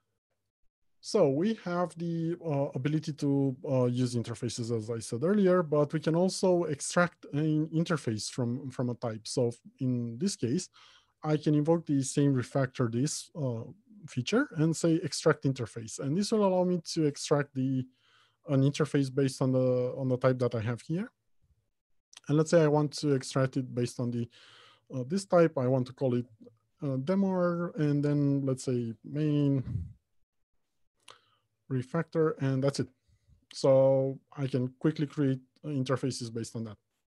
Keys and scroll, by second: 12.8 ctrl+alt+shift+t.